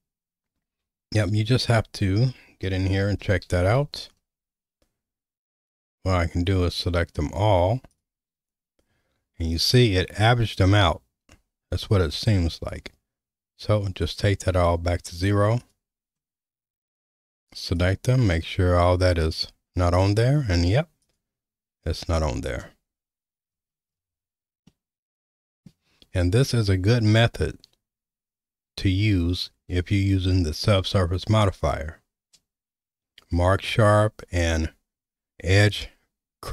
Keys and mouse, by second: 1.4 ctrl+z, 3.5 alt+a, 6.4 click, 7.9 ctrl+click, 12.9-14.1 drag, 15.6 click, 17.7 click, 19.3 click, 22.1 click, 24.7 middle click.